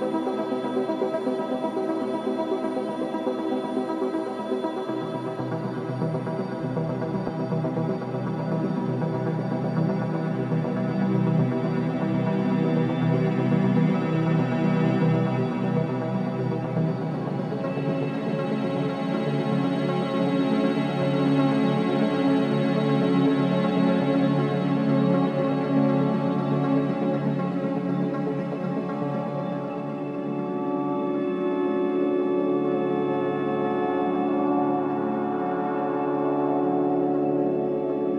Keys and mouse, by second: 0.0 shift+middle click, 0.1 shift+click, 0.4 middle click, 0.7-1.3 typing, 2.6-3.1 typing, 4.4-9.2 alt+drag, 9.9-10.3 typing, 10.8-14.1 drag, 14.4 typing, 15.3-20.1 alt+drag, 19.7-21.0 typing, 21.6-23.7 alt+drag, 24.7 Tab, 25.4 alt+click, 26.6 ctrl+alt+click, 27.3 click, 28.4-33.9 alt+drag, 33.5-38.1 typing, 37.0 alt+shift+click, 37.6 alt+middle click, 38.0-38.1 alt+drag.